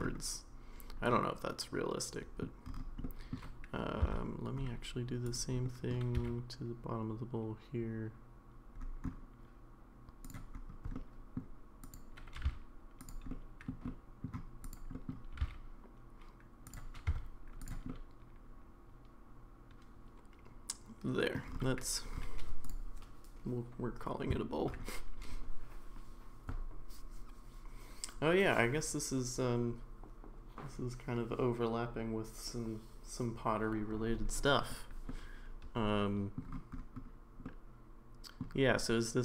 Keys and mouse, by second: 1.1-2.4 middle drag, 3.0-3.3 middle drag, 4.0 Tab, 5.6 middle click, 6.1 g, 10.9 middle click, 11.9 click, 12.4 g, 13.3 middle click, 13.8 middle click, 14.7 click, 14.9 middle click, 15.3 g, 17.1 Tab, 17.9-21.3 middle drag, 35.1-36.4 middle drag, 37.4-38.4 middle drag.